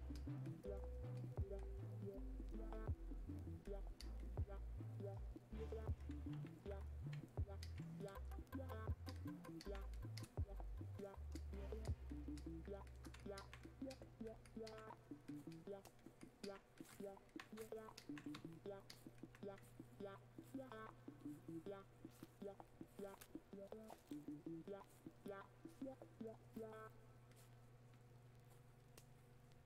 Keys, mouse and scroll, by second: 18.3-29.6 alt+drag.